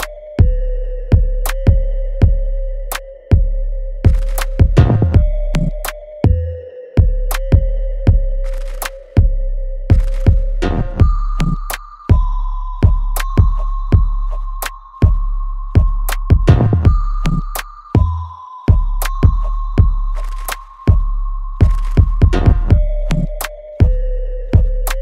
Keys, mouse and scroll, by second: 1.7 Escape, 2.1 click, 3.6 right click, 4.5 click, 9.7 click, 10.5 1, 13.1 click, 15.1 scroll down 1, 15.8 middle click, 17.3 click, 19.2 right click, 20.5 click, 21.1-21.8 scroll down 1, 22.1 middle click, 23.1 scroll down 1.